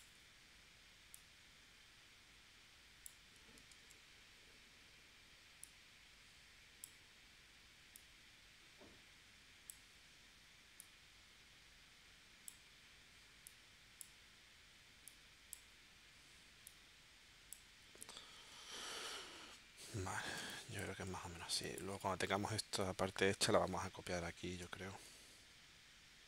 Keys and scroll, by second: 3.8 super+z, 20.4 space, 21.5 space, 24.6 space.